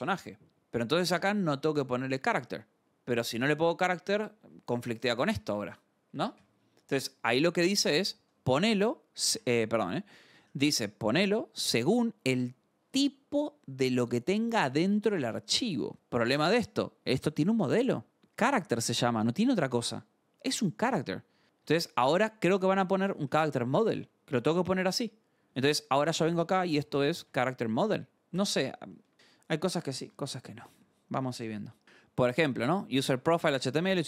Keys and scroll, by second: 0.9-2.3 typing, 2.1 Escape, 3.4-4.7 typing, 5.0 Escape, 6.0 k, 6.5 Return, 8.2 j, 8.4 Return, 10.9 j, 14.6 shift+;, 15.7 Return, 18.1-20.0 typing, 21.6-24.4 typing, 26.2-28.7 typing, 29.5 alt+Tab, 31.3 scroll.